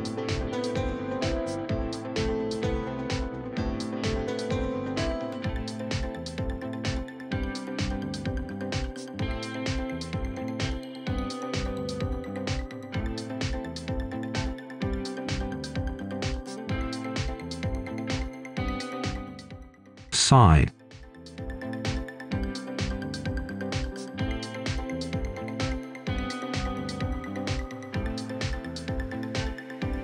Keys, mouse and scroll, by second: 1.0 right click, 3.0-5.6 drag, 5.6 scroll down 1, 5.8 right click, 6.9-7.9 scroll up 1, 7.9 click, 9.2 right click, 11.0 scroll down 1, 11.7 click, 12.1-14.0 right drag, 14.0 scroll up 1, 14.1 right click, 14.7 scroll up 1, 14.9 right click, 15.2 Tab, 15.7 Escape, 16.0 click, 16.7 Tab, 17.8 scroll up 1, 18.4 ctrl+click, 19.1 ctrl+shift+s, 19.2-20.0 typing, 21.0-24.4 drag, 24.4 Tab, 25.3-28.4 drag, 28.4-30.0 right drag.